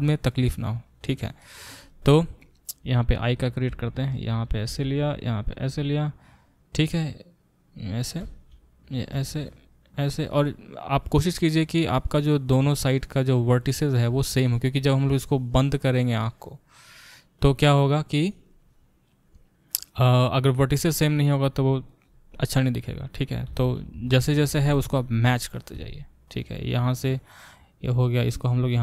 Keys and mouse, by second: 3.3 click, 3.7 e, 4.7 e, 8.2 e, 9.1 e, 23.5 e, 25.7 e, 27.8 click, 28.6-28.8 shift+middle drag.